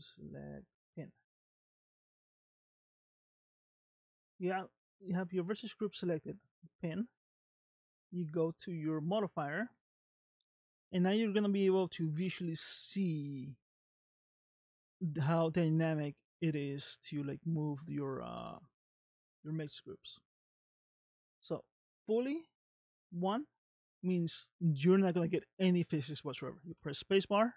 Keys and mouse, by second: 0.7 click, 11.1 shift+middle click, 12.1-13.4 middle drag, 21.5-22.9 drag, 23.7-25.2 middle drag, 26.8 space.